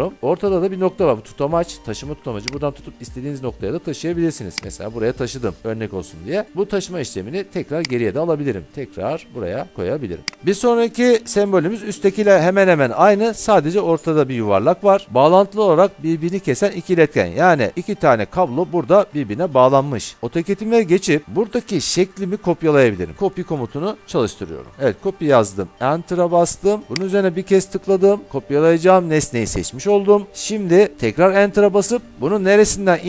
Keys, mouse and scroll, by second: 2.6 click, 4.7 click, 8.0-10.4 drag, 20.1 alt+Tab, 23.2 Escape, 23.2 typing, 24.7 Return, 27.2 click, 31.4 Return.